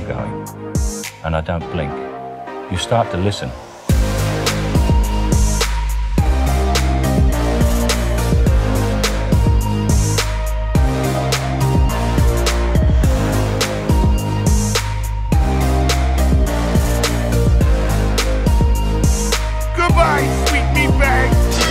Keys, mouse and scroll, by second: 0.5 l, 1.3 click, 1.9 ctrl+z, 3.9 l, 4.4 middle drag, 4.6 click, 5.0-7.4 middle drag, 10.6 ctrl+v, 11.8 click, 12.0 middle click, 15.9-16.5 middle drag, 17.1 middle click, 17.5-17.8 drag, 17.8 middle click, 19.2 click, 20.1 right click, 20.6 g, 20.7 g.